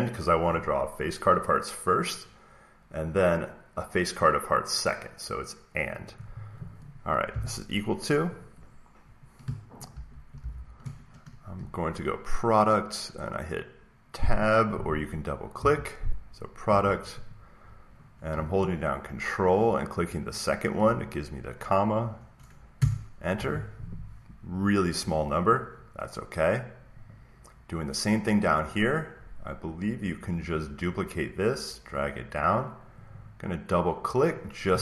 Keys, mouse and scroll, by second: 1.0 click, 3.0-5.1 drag, 5.9-8.0 drag, 9.6-10.9 typing, 11.5 Down, 15.5 Tab, 17.2 click, 20.2 ctrl+click, 22.7 Return, 23.7 Return, 24.5 click, 27.0 click, 28.7 click, 31.8 click, 33.0 click, 33.1 click.